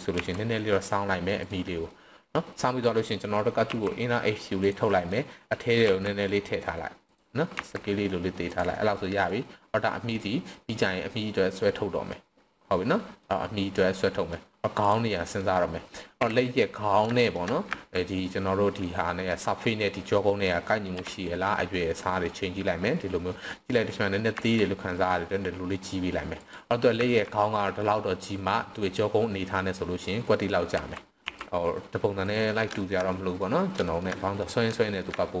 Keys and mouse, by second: 0.1 r, 1.4 drag, 1.9-2.3 middle drag, 3.7 i, 4.6 click, 4.9 middle click, 5.9 e, 7.0 click, 7.6 s, 8.4 click, 8.9-9.2 middle drag, 10.2-10.5 drag, 11.5-12.1 drag, 12.9 click, 13.7 click, 15.1 click, 16.1 KP_7, 17.2 shift+click, 17.7 z, 20.9 KP_1, 24.4 s, 26.4 click, 26.9 z, 29.5-30.4 middle drag, 30.7 s, 31.2 KP_1, 31.2 i, 32.1 click, 32.7 middle click, 33.1-33.4 middle drag, 33.9 shift+middle click, 34.2 middle click, 34.2 i, 34.7 shift+middle click.